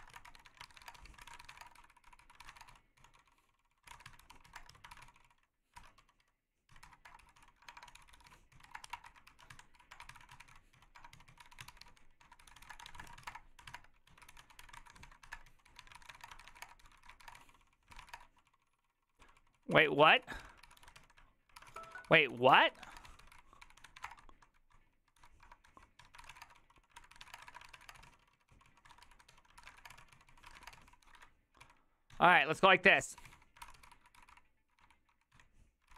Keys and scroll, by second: 0.0-35.9 typing, 18.8 ctrl+c, 18.8 Return, 26.0 ctrl+c, 26.0 Tab.